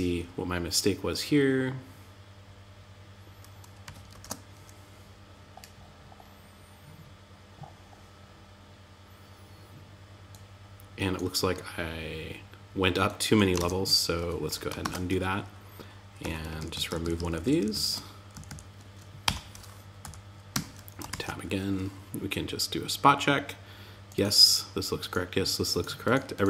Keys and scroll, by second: 3.5 alt+super+u, 13.0 super+Tab, 14.1 super+z, 15.6 Up, 15.9 alt+Right, 17.7 Right, 19.4 Down, 19.9 Tab, 20.4 super+s.